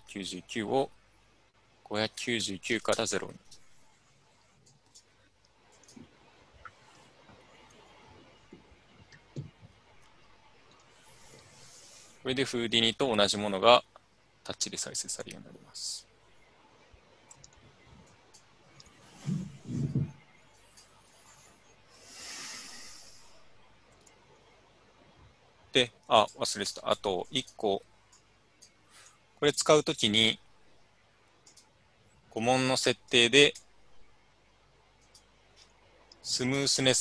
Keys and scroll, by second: 1.7-3.9 typing, 3.5 Return, 5.1 typing, 6.3 typing, 7.4 typing.